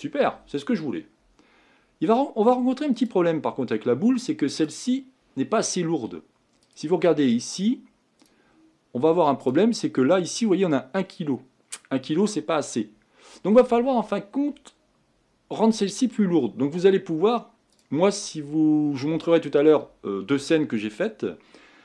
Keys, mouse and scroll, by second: 3.0-5.6 drag, 5.6 scroll down 3, 6.7 click, 16.8-17.8 scroll up 4, 17.8 click.